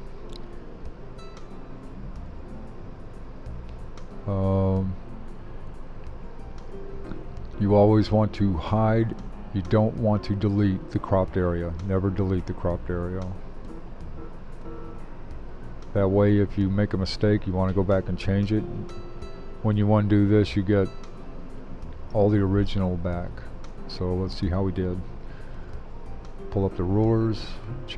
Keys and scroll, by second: 25.5 super+r.